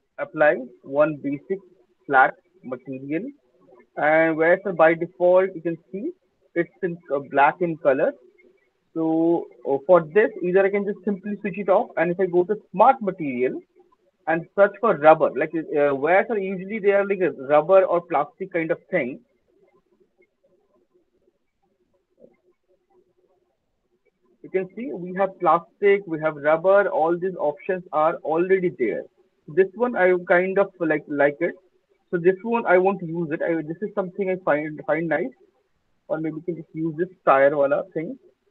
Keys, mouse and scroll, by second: 0.9 click, 3.1 alt+middle click, 3.8 click, 5.9 click, 6.3 click, 8.4 click, 10.0 click, 10.8 click, 12.0 middle click, 13.2 scroll down 1, 13.3 click, 19.9-21.5 typing, 22.3 click, 22.8-24.0 typing, 36.7-38.5 drag.